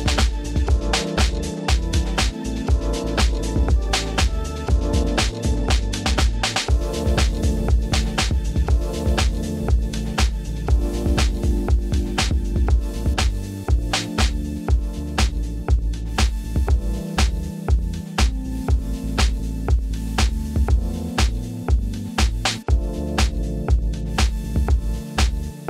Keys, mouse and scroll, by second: 0.5 click, 0.8 click, 0.9 middle click, 1.4 shift+click, 1.5 middle click, 1.8 g, 1.9 y, 2.3 click, 2.5 click, 2.5 middle click, 2.7 click, 2.8 Tab, 3.1 click, 4.0 middle click, 4.5 click, 5.9 shift+middle drag, 6.3 middle click, 6.9 click, 7.5 drag, 8.1 click, 8.1-9.2 typing, 8.7 click, 9.1 click, 10.8-12.2 ctrl+drag, 14.1 click, 14.5 click, 15.8-16.2 drag, 17.3 click, 18.0 Tab, 18.9 ctrl+KP_Add, 19.0 ctrl+KP_Add, 19.2 ctrl+KP_Add, 20.1 ctrl+v, 21.2 Tab, 22.0 click, 22.9 ctrl+z, 23.0-24.2 ctrl+drag.